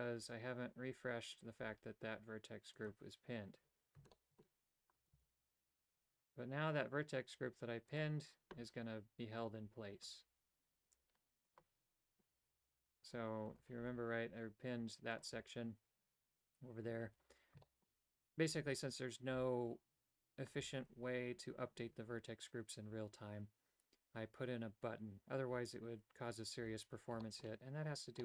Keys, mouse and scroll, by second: 2.8 click, 4.2 shift+middle click, 5.0 right click, 5.3 g, 9.6 middle click, 10.9 typing, 11.5 click, 13.5 right click, 13.8 g, 17.8 shift+middle click, 26.7 a, 27.3 shift+middle click.